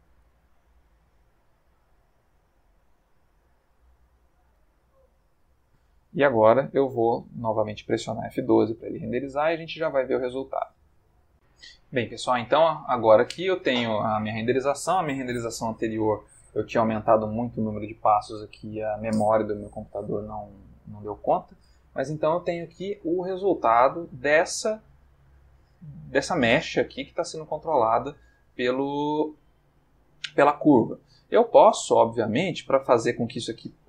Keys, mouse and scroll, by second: 0.3 ctrl+middle click, 0.3-1.0 ctrl+middle drag, 1.8 click, 3.1 s, 4.2 click, 5.1-5.8 ctrl+middle drag, 8.8 F12, 11.3 click, 12.8 click, 27.6 click, 28.9 click, 29.4 g, 30.6 Escape, 31.1-32.2 ctrl+middle drag.